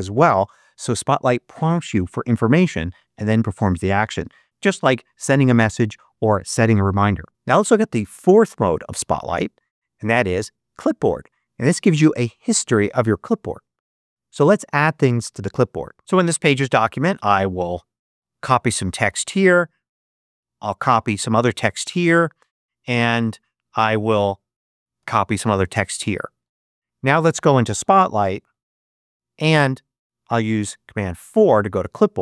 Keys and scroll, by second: 18.0 super+c, 20.6 super+c, 24.9 super+c, 26.3 super+q, 28.5 super+space, 30.9 super+4.